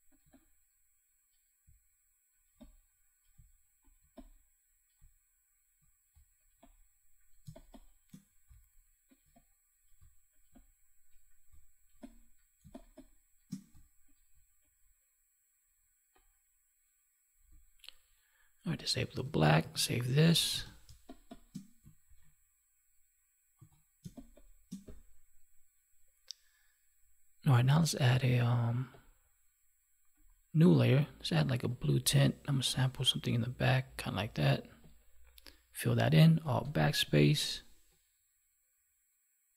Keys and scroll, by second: 7.4 space, 12.5 space, 19.6 ctrl+s, 19.9 ctrl+w, 20.8 space, 24.0 space, 36.6 alt+BackSpace.